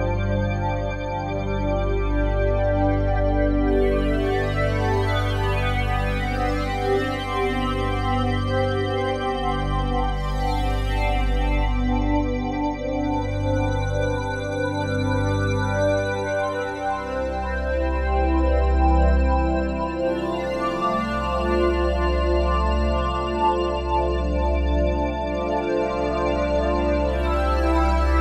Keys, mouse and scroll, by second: 1.0 click, 3.4-4.6 drag, 4.6 ., 4.9 5, 5.1 Return, 7.0-8.2 drag, 8.2 ., 8.8 7, 9.1 Return, 10.8-13.6 drag, 13.6 ., 13.9 7, 14.2 Return, 19.9 click, 20.4 click, 22.7 click, 25.6-28.2 drag.